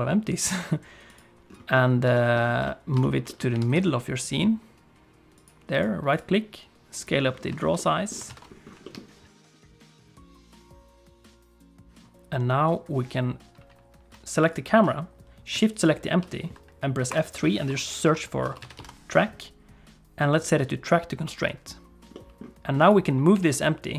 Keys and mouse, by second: 1.7 middle click, 2.1 shift+click, 2.6 middle click, 3.0 shift+middle click, 3.3 middle click, 3.5 g, 5.8-7.1 right drag, 7.6 shift+middle click, 7.8 middle click, 8.3 ctrl+s, 8.8 shift+middle click, 10.0 middle click, 10.5 shift+middle click, 10.8 middle click, 14.5-15.5 drag, 15.7 shift+click, 17.1 F3, 18.0 t, 22.1 middle click, 23.3 g.